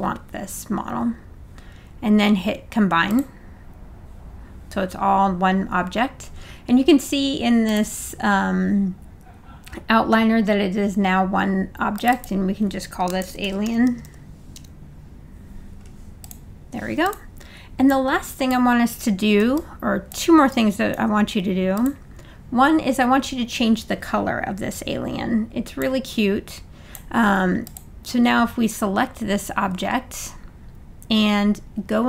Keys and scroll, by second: 13.0-14.5 typing.